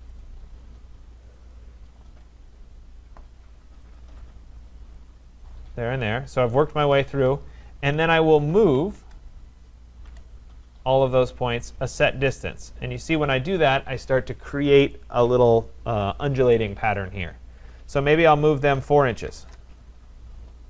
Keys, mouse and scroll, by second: 0.3 click, 1.4 shift+click, 4.0 shift+click, 5.1 shift+click, 8.1-9.1 typing, 11.1 click, 18.7 4, 19.3 shift+', 19.4 Return.